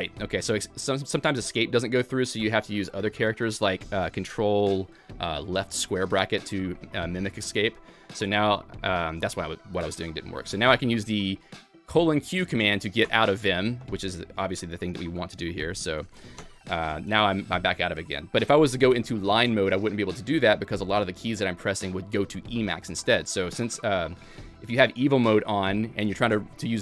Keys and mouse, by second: 0.1 Escape, 7.5 :, 8.2 :, 13.0 :, 15.0 :, 15.8 :, 16.0 :, 16.4 shift+;, 23.9 Escape, 24.6 alt+x, 25.6 Escape.